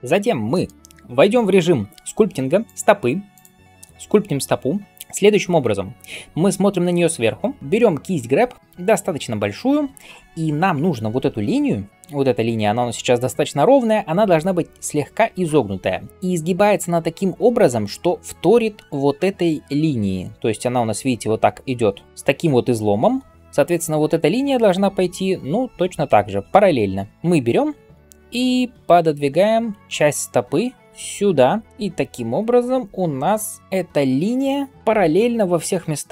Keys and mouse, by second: 2.7-8.6 drag, 6.9 KP_7, 11.3-14.0 d, 14.7 d, 14.8 d, 17.6 d, 20.7-22.0 d, 23.0-27.1 d, 29.8 f.